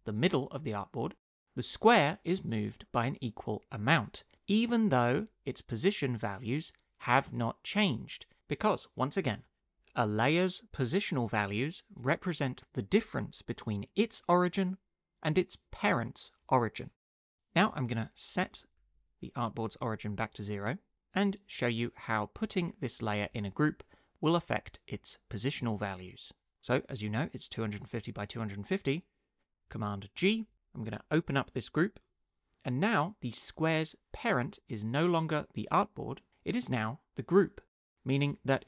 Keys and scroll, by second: 0.0-0.1 typing, 18.8 0, 19.0 Return, 19.6 0, 19.8 Return, 30.2 super+g.